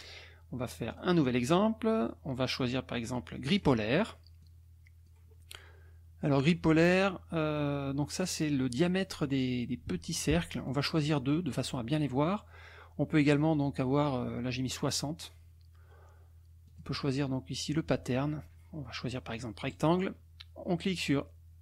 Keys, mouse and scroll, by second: 0.9 click, 3.5 click, 4.4 click, 7.0 click, 10.7 click, 11.1 click, 14.7 click, 16.7 click, 19.7 click.